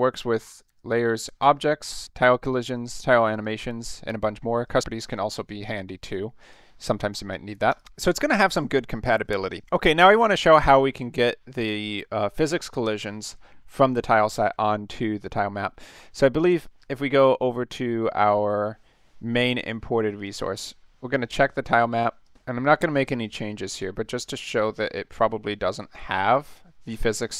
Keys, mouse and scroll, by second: 0.6 click, 1.0 click, 2.2 click, 2.8 click, 3.3 click, 4.6 click, 5.1 click, 6.0 click, 6.4 click, 6.8 click, 7.1 click, 7.7 click, 16.4 click, 20.2 click, 22.2 click, 23.6 click, 24.5 click, 26.3 click, 26.9-27.3 scroll up 3.